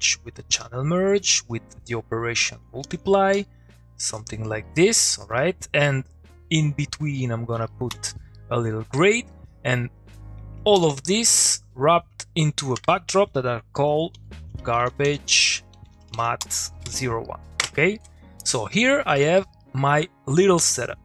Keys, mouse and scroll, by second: 0.3 Down, 0.5 Return, 1.6-2.5 click, 3.1 ctrl+middle click, 3.3 click, 4.6 middle click, 5.4 click, 7.9 g, 8.3 middle click, 9.5 click, 12.9 click, 14.1 shift+g, 16.1-17.1 typing, 19.1 click, 19.3 middle click, 19.4 click, 19.6 middle click.